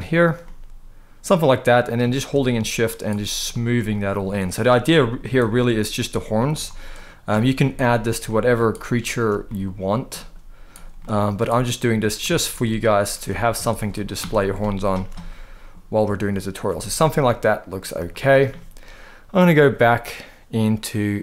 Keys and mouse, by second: 0.1-1.5 middle drag, 2.1 shift+click, 2.8 shift+click, 3.2 shift+click, 3.6 middle click, 4.1 shift+click, 4.7 middle click, 5.1 shift+click, 5.4 shift+click, 5.9 middle click, 6.2 shift+click, 6.6 shift+click, 7.1 middle click, 7.5 shift+click, 8.0 middle click, 9.2 middle click, 9.8 click, 10.4 click, 10.7 middle click, 11.2 click, 11.7 middle click, 12.1 shift+click, 12.4 shift+click, 13.1 middle click, 13.4 shift+click, 13.6 shift+click, 13.9 middle click, 14.3 shift+click, 14.9 middle click, 16.5 middle click, 17.8 shift+click.